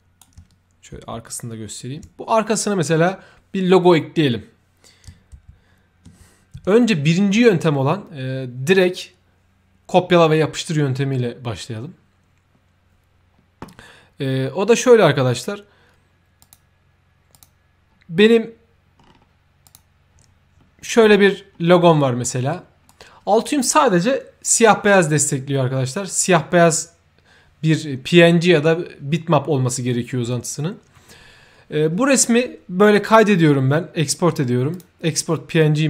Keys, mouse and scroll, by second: 1.0 ctrl+f, 6.5 f, 16.3 click, 17.2 click, 18.9 middle click, 19.6 click, 20.5-20.8 scroll up 1, 21.2-21.6 scroll up 2, 22.2 ctrl+middle click, 22.8 ctrl+right click, 25.5-26.3 ctrl+middle drag, 32.8 ctrl+click, 34.7 ctrl+click.